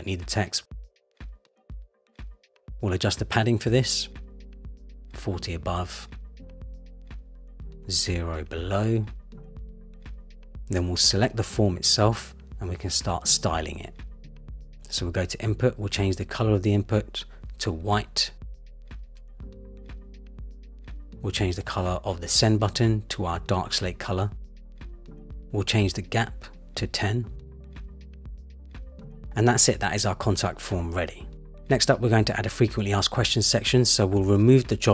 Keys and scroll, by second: 5.1 Return, 9.4 Return, 20.2 Return, 26.2 shift+Down, 27.2 Up.